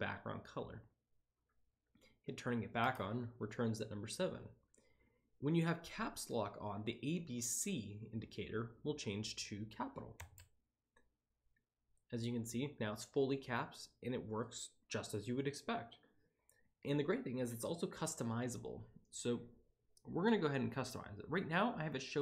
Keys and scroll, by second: 2.7 7, 10.1 Caps_Lock.